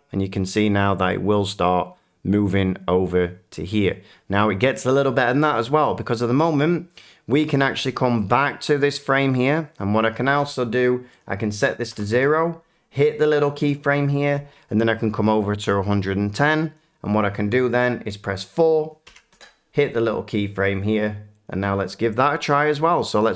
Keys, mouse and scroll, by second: 9.7 click, 11.2 click, 11.9 typing, 12.1 Return, 13.7 click, 16.7 click, 17.8 click, 19.0 typing, 19.3 Return, 21.4 click.